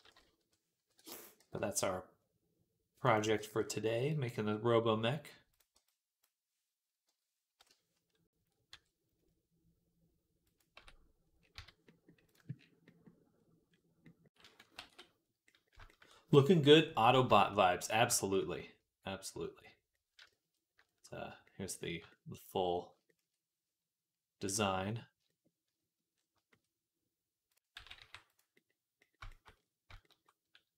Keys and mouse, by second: 0.2-4.3 drag, 0.2 ., 1.2 g, 3.1 g, 4.3-19.2 right drag, 5.3 click, 5.3 middle click, 5.6 b, 6.9 ., 8.5 r, 10.6 Tab, 11.4 z, 12.1 click, 14.6 ctrl+s, 19.2 click, 20.1 shift+right click, 20.9 middle click, 21.8 shift+middle click, 22.5-24.6 shift+right drag, 24.7 right click, 25.2 shift+right click, 26.0-28.8 shift+right drag, 27.6 g, 28.1 g, 28.8-30.7 shift+middle drag.